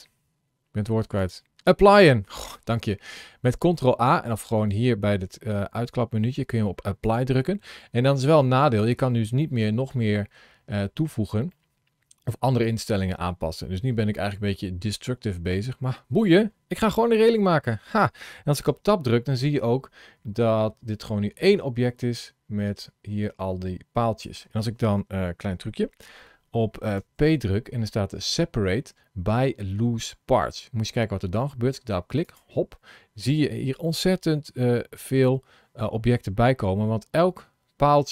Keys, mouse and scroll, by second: 1.1 click, 9.3 middle click, 10.9 scroll up 1, 11.4 middle click, 15.2 middle click, 15.4 middle click, 16.8 shift+middle click, 18.5 Tab, 19.0 middle click, 26.9 p, 34.8 ctrl+shift+a.